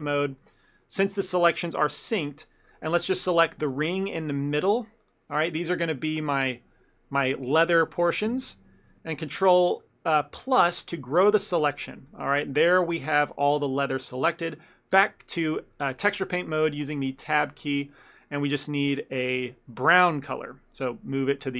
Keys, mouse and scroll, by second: 0.3 ctrl+middle click, 1.1 3, 1.5 ctrl+middle click, 2.1 alt+click, 2.9 shift+middle click, 4.1 shift+middle click, 5.5 ctrl+middle click, 9.5 shift+middle click, 9.9 middle click, 10.8 shift+middle click, 11.2 ctrl+middle click, 12.0 shift+middle click, 13.3 ctrl+middle click, 15.1 Tab, 18.4 scroll down 1, 19.2 click.